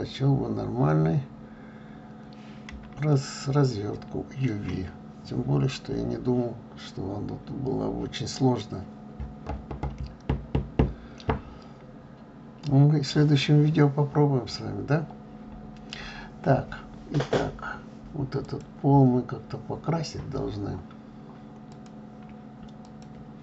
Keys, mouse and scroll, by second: 3.3-18.5 shift+middle drag, 18.5 click, 21.6 click.